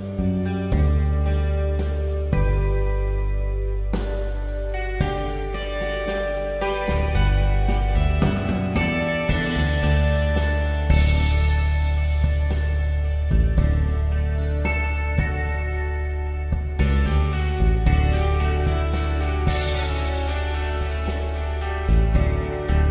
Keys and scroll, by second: 0.0-0.8 typing, 15.6 Delete, 19.1 ctrl+d, 21.3 v.